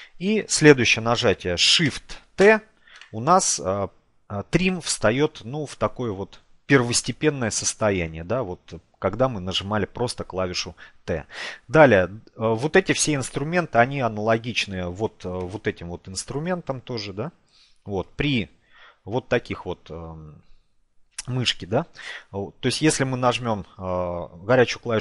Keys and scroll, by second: 23.9 n.